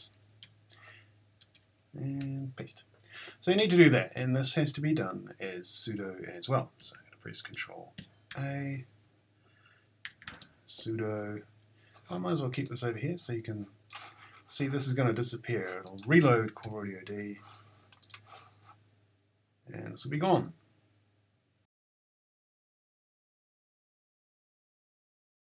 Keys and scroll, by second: 0.1 super+c, 0.4 q, 1.4 Return, 2.2 super+v, 6.8 Left, 8.3 ctrl+a, 9.8-10.8 typing, 16.6 Return.